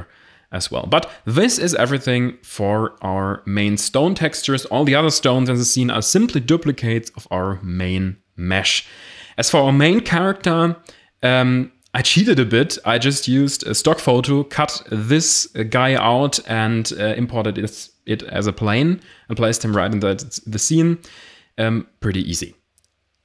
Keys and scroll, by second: 2.3 g, 3.8 0, 12.6 a, 17.8 a.